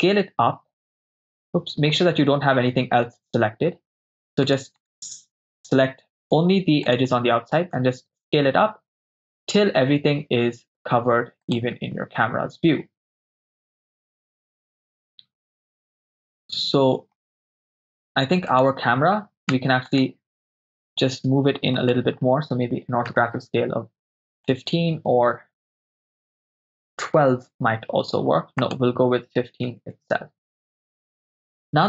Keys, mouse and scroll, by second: 0.8 right click, 2.8 a, 2.9 a, 4.1 right click, 5.5 alt+shift+right click, 6.9 alt+shift+click, 7.9 s, 11.5-13.5 drag, 13.5-17.2 ctrl+middle drag, 18.6 right click, 19.6 Tab, 19.9 right click, 21.8-23.2 drag, 24.4-27.4 drag, 28.6-29.9 drag.